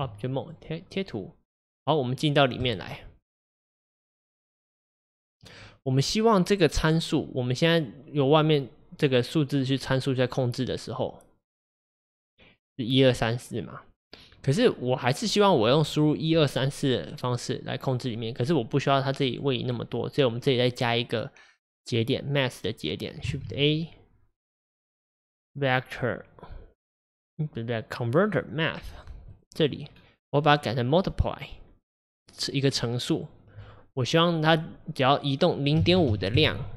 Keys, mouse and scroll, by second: 0.1 Tab, 0.5 click, 7.9-29.4 drag, 31.4-36.4 drag.